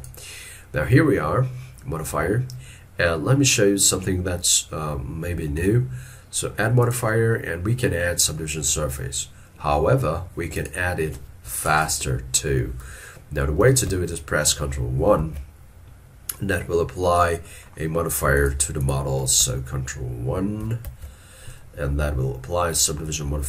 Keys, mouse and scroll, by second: 15.2 ctrl+1, 17.5 middle click, 20.9 ctrl+1.